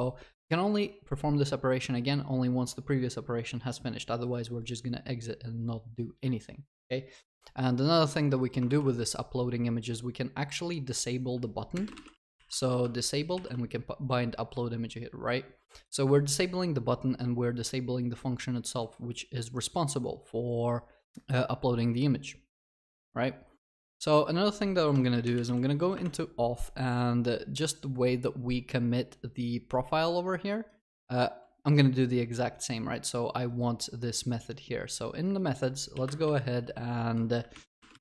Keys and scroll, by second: 8.7 ctrl+c, 12.6 Return, 24.9 ctrl+shift+n, 25.9 ctrl+shift+n.